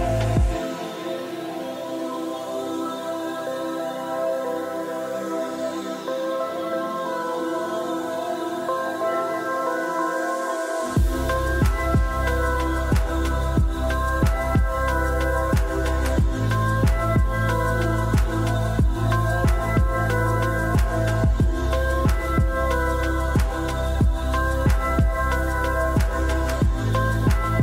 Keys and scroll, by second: 9.5 BackSpace, 9.6 8, 10.5 Return.